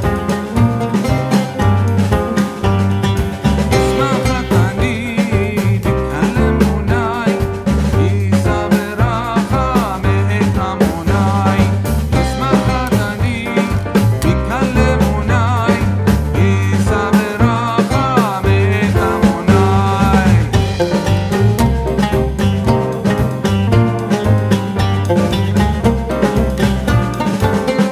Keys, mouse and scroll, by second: 0.8 click, 2.4 shift+k, 4.9-7.5 drag, 7.5-12.7 drag, 16.7 click, 17.7-21.7 alt+drag, 21.7 a, 22.9 shift+a, 24.7-27.3 drag, 27.3 click.